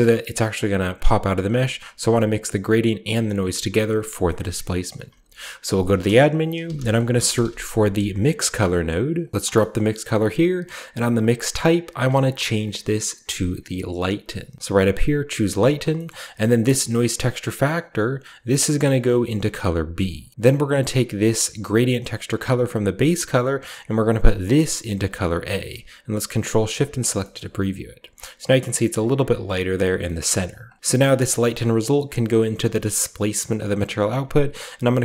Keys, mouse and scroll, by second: 2.5-4.2 shift+drag, 4.3-5.7 shift+middle drag, 5.0 typing, 5.7-7.2 shift+drag, 6.5-7.3 typing, 8.5 click, 9.1 click, 9.7-10.8 scroll up 2, 10.8 click, 10.8-14.8 scroll up 1, 14.8 drag, 15.5 click, 16.0-16.8 middle drag, 16.6 click, 19.0 click, 20.3-20.9 scroll down 1, 20.9 click, 23.5-25.2 drag, 26.3 ctrl+shift+click, 27.3 scroll up 2, 29.0 scroll up 1, 30.1-30.6 middle drag, 30.4-30.8 drag, 30.7 middle click, 30.7-31.2 scroll down 1, 31.7-33.1 drag, 33.6 click.